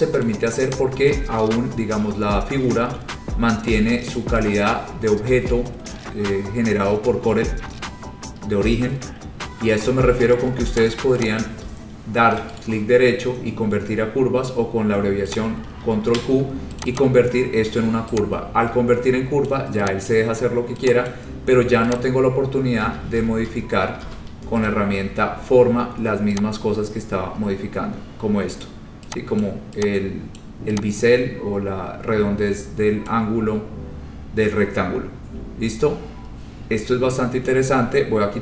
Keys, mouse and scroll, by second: 0.4 click, 1.2 click, 3.0-5.0 scroll, 7.5 scroll, 10.9 click, 11.4 click, 12.7 right click, 15.6 click, 16.1 ctrl+q, 17.0 click, 17.1 click, 19.6 click, 20.3 click, 21.3 click, 22.1 click, 23.1 ctrl+z, 23.3 ctrl+z, 23.6 ctrl+z, 24.2 ctrl+z, 28.8 click, 29.5 click, 30.5 click, 33.2 click, 33.5-34.2 scroll.